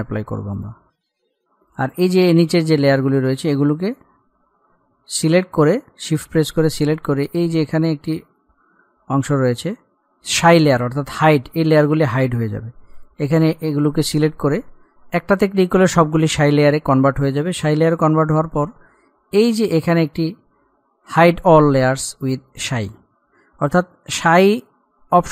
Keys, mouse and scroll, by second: 0.8 click, 1.6-2.4 scroll down 1, 3.5 click, 4.1-4.5 scroll down 1, 5.7 shift+click, 13.2 click.